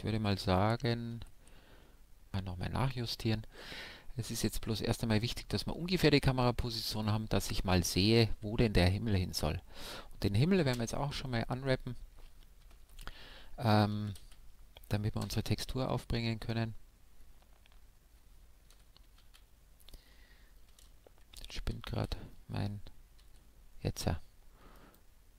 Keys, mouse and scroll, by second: 1.1 shift+f, 2.9-4.7 drag, 6.9-10.7 right drag, 10.7 u, 12.7 Tab, 13.9 a, 14.2 a, 15.2 u, 19.2 a, 20.7 Tab, 21.3 Tab, 21.9 a, 23.2 u.